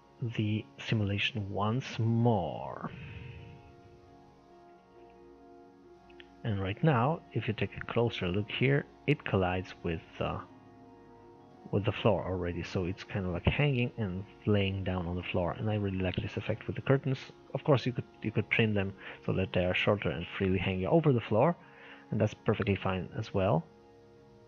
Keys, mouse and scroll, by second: 0.6 scroll down 1, 0.9-4.5 middle drag, 4.5 click.